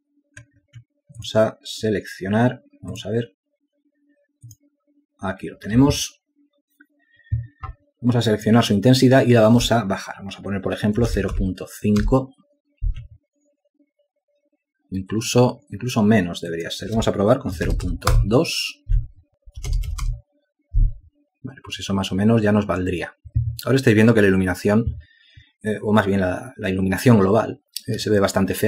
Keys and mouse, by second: 13.4-14.2 typing, 14.4 Return, 21.2 alt+click.